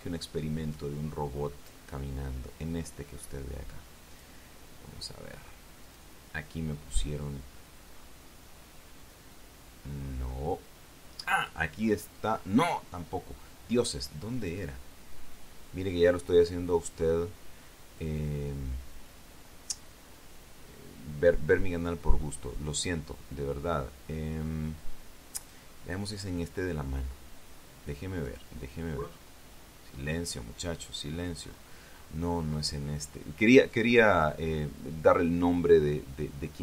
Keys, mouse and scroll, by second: 2.8 scroll down 1, 4.9 click, 6.7 click, 7.4-9.0 scroll down 6, 10.6-11.4 scroll up 2, 13.2-13.8 scroll up 4, 15.2 click, 18.3-19.0 scroll down 4, 20.9 scroll up 2, 26.2 click, 29.1 click, 29.8-30.8 scroll down 3, 32.2-33.6 scroll up 5, 34.5 click.